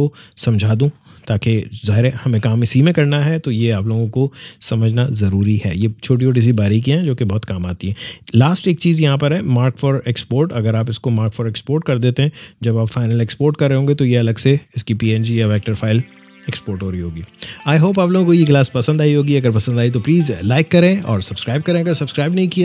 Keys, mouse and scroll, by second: 11.5 click.